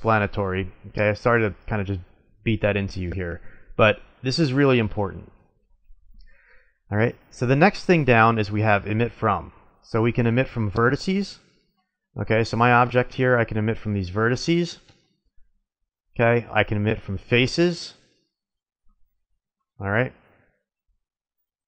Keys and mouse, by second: 10.6-12.7 drag, 12.7 Tab, 13.2 click, 13.3 middle click, 14.8 a, 19.5 ctrl+Tab.